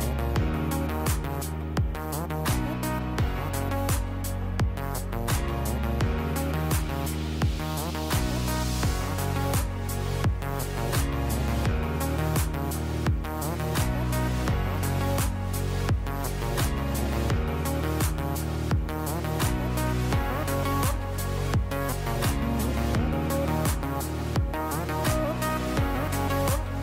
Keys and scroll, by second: 5.5 space, 7.9 space.